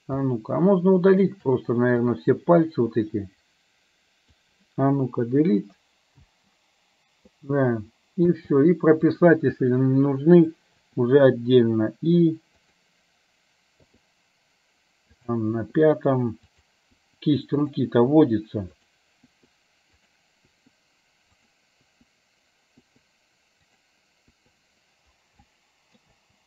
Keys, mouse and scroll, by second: 0.4-1.4 shift+middle drag, 2.0-4.5 drag, 5.5 Delete, 6.4 space, 8.5 space, 9.1 click, 10.9 i, 12.7 click, 15.4 click, 15.6 i, 16.6 click, 17.0 i, 17.7 click, 18.2 i, 18.9 click, 19.3 i, 20.1 click, 20.5 i, 21.5 click, 21.9 i, 22.9 i, 24.3 i, 25.5 middle click, 26.1 space.